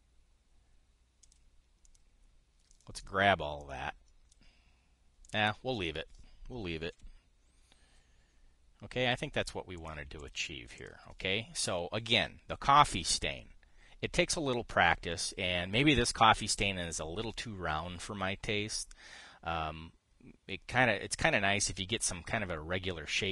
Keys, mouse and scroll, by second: 2.0 click, 2.6 click, 3.4 click, 3.7 click, 4.3-5.1 drag, 6.0 click, 7.6 KP_5, 10.4 click, 10.9 click, 11.5 click.